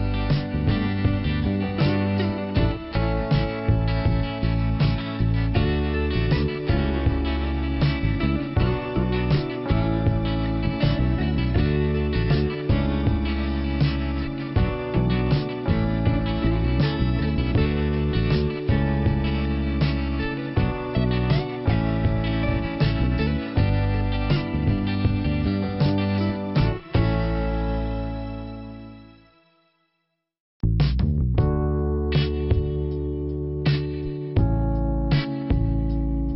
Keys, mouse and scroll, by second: 1.6 click, 2.3 click, 3.4 click, 5.2 click, 6.1 click, 7.1 click, 9.5 click, 10.4 click, 12.3 click, 13.8 click, 15.9 click, 17.3 click, 18.7 click, 20.0 click, 20.9 click, 26.2 p, 27.0-27.3 scroll down 2, 29.1 click, 30.1 click, 30.5 click, 31.3 scroll up 2, 32.4 click, 33.3 click, 35.3 click, 35.4 click.